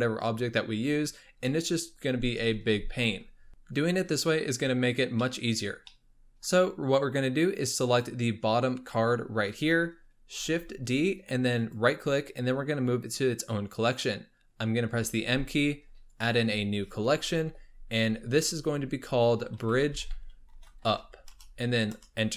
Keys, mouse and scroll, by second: 5.2-7.9 shift+middle drag, 7.9 click, 10.4 shift+d, 14.9 m.